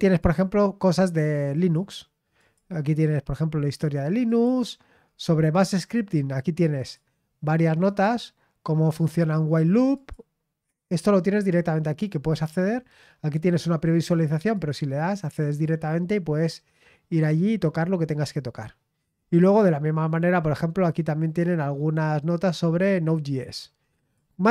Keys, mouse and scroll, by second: 0.2 click, 1.5 click, 2.4 click, 4.3 click, 5.1-5.5 scroll down 1, 6.8 click, 7.8 click, 9.9 click, 10.9 click, 14.5 click, 17.7-19.4 scroll down 4, 19.4 click, 21.2 click, 22.6-23.1 scroll down 1, 23.9 click.